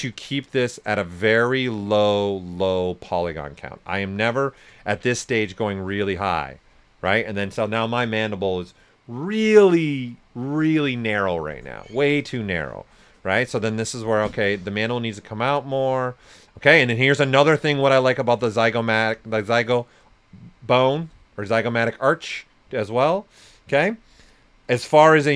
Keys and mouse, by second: 0.2-2.0 drag, 3.4 shift+click, 4.8 ctrl+right click, 7.6-8.3 typing, 12.9 click, 12.9 typing, 16.7 right click, 17.3 click, 18.7 right click, 19.2 shift+click, 20.2 right click, 21.7-25.1 right drag, 25.1 click.